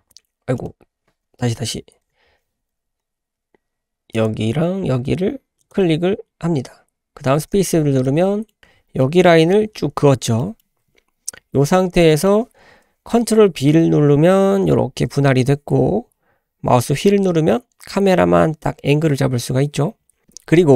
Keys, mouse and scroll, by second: 7.8 scroll down 2, 8.0 middle click, 8.6 click, 8.6 2, 8.6 KP_Decimal, 9.0 middle click, 9.0 scroll down 1, 10.0-10.4 scroll down 2, 10.4 middle click, 10.7 `, 10.9-12.0 scroll up 3, 12.1 shift+middle click, 14.6 ctrl+b.